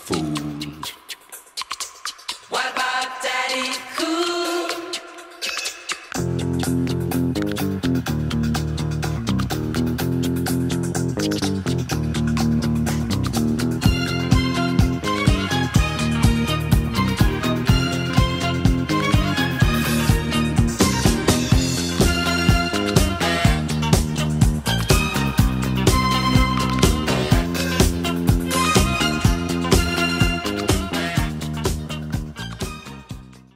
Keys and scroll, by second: 2.8 Return, 5.0 space, 21.4 ], 23.0 [, 24.2 ], 27.0 alt+BackSpace.